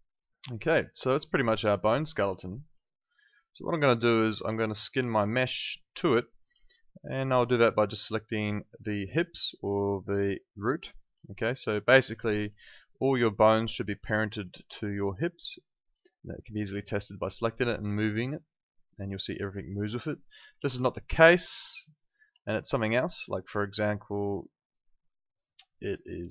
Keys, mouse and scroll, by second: 0.1 alt+click, 0.7 alt+right click, 0.9 alt+middle click, 1.2 alt+right click, 1.5 alt+click, 1.9 alt+right click, 2.8 alt+click, 4.5 alt+click, 6.2 alt+click, 10.4 alt+click, 10.7 alt+right click, 11.2 click, 11.5 alt+click, 11.8 alt+right click, 12.6 alt+middle click, 14.0 click, 14.6 alt+right click, 15.2 alt+click, 15.6 alt+right click, 17.4 click, 20.6 ctrl+z, 21.0 alt+click, 21.9 alt+right click, 23.2 click, 23.7 alt+click.